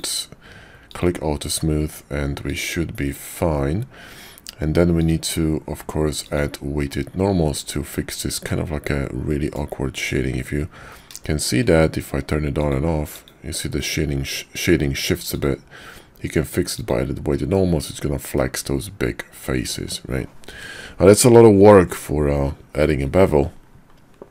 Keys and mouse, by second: 0.9 click, 2.4 click, 5.0 click, 6.4 click, 8.4-9.6 middle drag, 11.2 shift+click, 12.5 click, 13.1 click, 15.4-16.8 drag, 18.4-19.9 middle drag.